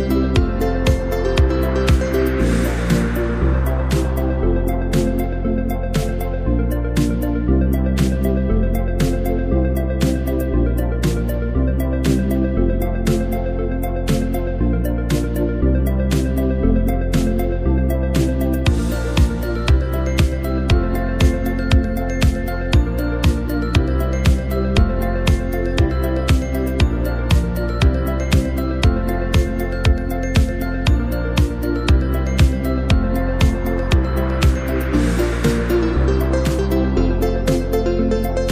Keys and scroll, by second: 0.5-1.0 typing, 10.8 super+-, 10.9 super+-, 11.8 z, 12.5 v, 19.7 BackSpace, 20.0 Return, 21.8 space, 25.9-26.6 BackSpace, 28.5 super+0, 29.5 space, 30.6 super+-, 30.7 super+-, 31.4-31.9 typing, 34.9 z, 36.0 v.